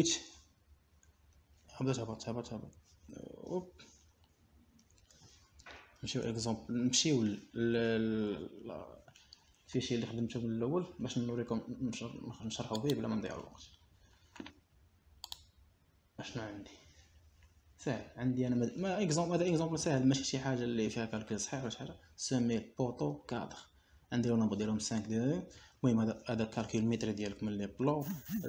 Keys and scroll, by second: 7.1 Escape.